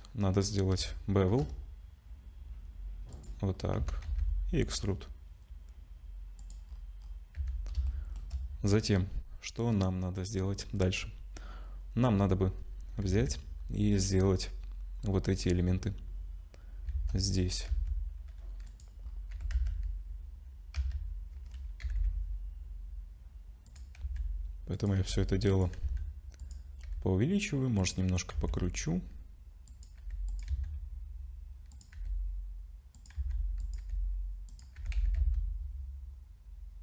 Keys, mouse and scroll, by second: 1.4 ctrl+shift+b, 3.5 scroll up 2, 3.8 a, 4.0 e, 6.7-7.7 scroll down 7, 7.4 Tab, 7.9 shift+middle click, 13.1 ctrl+s, 13.9 click, 16.9 shift+d, 19.1 scroll up 3, 19.3 g, 24.0 s, 25.0 g, 25.8 s, 26.8 r, 28.3 s, 30.0 g, 30.5 s, 31.9 g, 33.2 s, 33.8 g, 34.8 g.